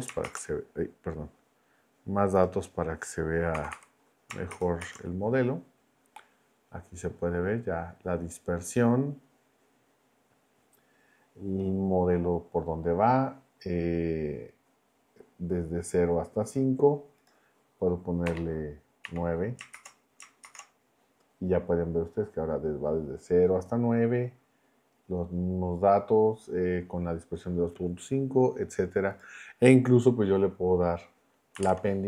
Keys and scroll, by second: 0.2 shift+Return, 3.5 0, 4.5 shift+Return, 18.2 BackSpace, 19.0 9, 19.7 shift+Return, 31.5 ,, 31.6 space.